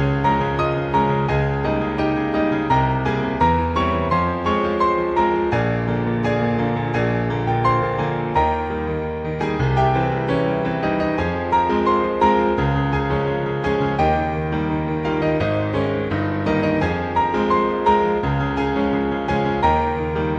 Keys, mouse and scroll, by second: 1.0 click, 3.3 click, 4.4 click, 4.8 click, 6.5 click, 8.3 click, 9.3-10.3 scroll down 3, 10.3 click, 16.4-17.3 scroll down 1, 17.5 click, 18.7-19.9 scroll up 3, 19.9 scroll down 1.